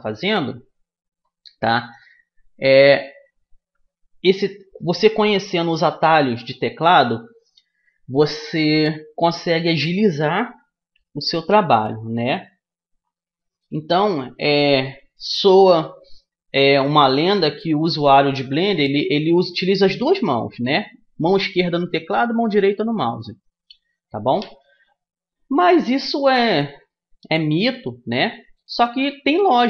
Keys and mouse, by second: 0.3-2.1 drag, 26.6-29.6 middle drag, 28.9 a.